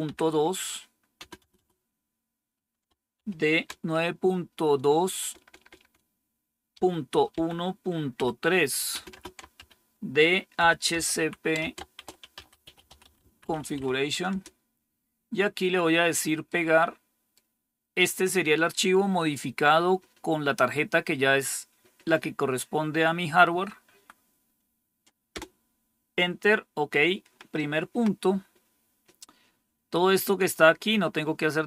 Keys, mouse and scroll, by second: 0.0-1.4 typing, 2.8-3.6 typing, 4.8-14.7 typing, 16.3-17.9 right drag, 23.7 Right, 25.2 Return, 29.3 scroll down 1, 30.3-31.6 scroll down 1.